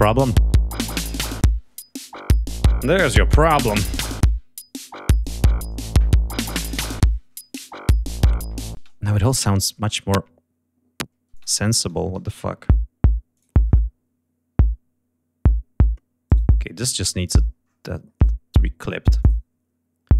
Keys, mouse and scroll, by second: 5.1-5.9 drag, 5.9 scroll down 2, 7.4-7.7 scroll up 2, 7.8 scroll down 2, 8.6 space, 9.4 click, 9.9 space, 11.2 click, 11.2 space, 11.8 click, 12.1 space, 13.2 click, 16.2 right click, 17.5-18.2 scroll down 2, 19.1 click.